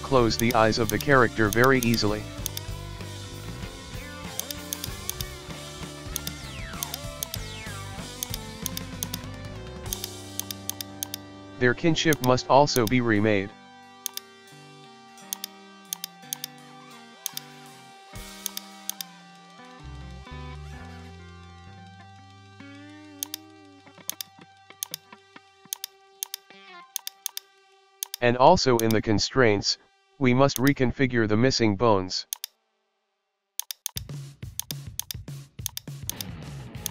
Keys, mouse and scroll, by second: 0.2 g, 0.9 right click, 1.3 g, 1.9 right click, 2.3 g, 2.7 shift+middle click, 3.0-3.9 scroll, 4.4 right click, 4.8 shift+right click, 5.1 shift+right click, 5.8 ctrl+p, 7.2 shift+right click, 7.9 ctrl+p, 8.7 right click, 9.6 ctrl+p, 10.4 right click, 10.7 shift+right click, 11.1 shift+right click, 11.7 ctrl+p, 12.8 right click, 13.1 middle click, 13.5-14.1 scroll up 1, 14.1 shift+right click, 15.0 ctrl+p, 16.0 right click, 17.0 ctrl+p, 17.6 Tab, 17.9 scroll down 1, 18.5 right click, 18.9-20.4 drag, 21.5 alt+g, 22.0 shift+middle click, 22.1 scroll up 1, 22.3-23.3 shift+middle drag, 23.3 right click, 24.1 click, 24.8 click, 26.2 right click, 27.0 click, 27.3 click, 28.0-29.5 drag, 30.5-32.1 drag, 32.3-33.6 drag, 33.9 right click, 34.6 click, 35.0-35.7 drag, 36.1 right click, 36.8 drag.